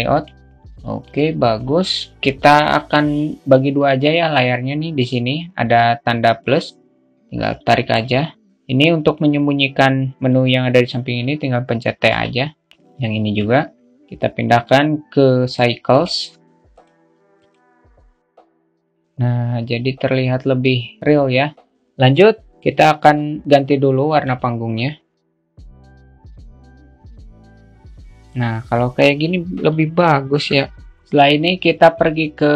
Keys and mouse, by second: 0.0-0.7 drag, 0.7 click, 6.3-7.5 drag, 11.9 t, 13.8 t, 15.3-18.8 drag, 23.8 click, 25.6 click, 29.3 click.